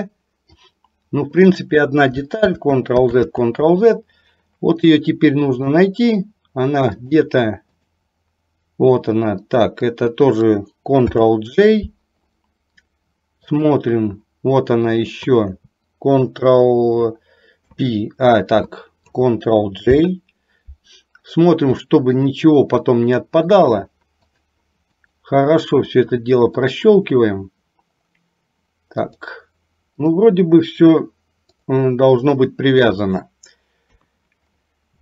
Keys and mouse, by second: 2.5 ctrl+z, 5.0 middle click, 7.2 click, 9.5 shift+click, 11.1 ctrl+j, 15.0 shift+click, 17.6 ctrl+p, 20.0 ctrl+j, 21.9 middle click, 23.6 click, 24.4 click, 25.0 click, 25.8 click, 26.6 click, 29.1 click, 30.1 click, 34.0 KP_3.